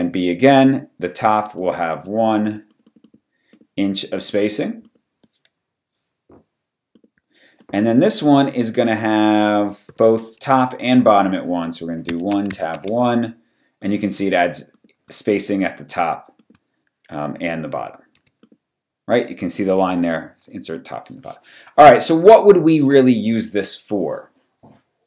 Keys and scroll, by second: 8.8 super+a, 9.9 super+b, 12.1 1, 12.2 Tab, 12.4 1, 12.7 Tab, 18.2 v.